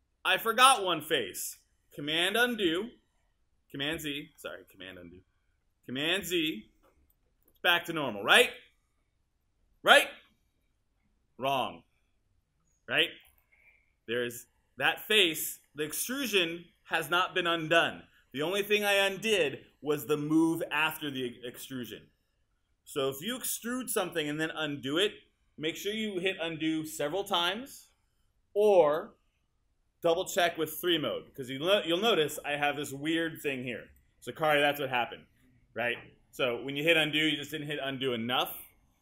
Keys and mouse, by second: 2.7 super+z, 6.2 super+z, 30.8 3, 34.5-35.9 alt+drag.